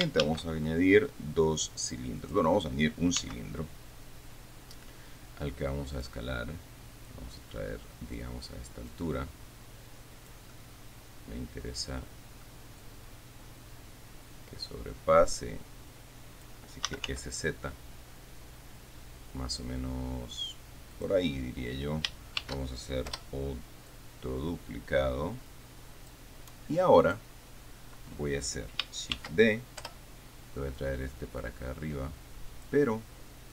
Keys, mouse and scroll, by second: 0.5 shift+a, 2.5 click, 3.5 s, 6.2 click, 7.3-8.6 drag, 9.2-10.8 drag, 10.8-12.5 middle drag, 12.5 click, 13.1-16.9 drag, 16.9-17.8 typing, 21.2 click, 22.7 shift+d, 23.4 Return, 24.2-26.6 drag, 27.3 right click, 29.4 shift+d, 30.1 Return, 31.1-33.1 drag.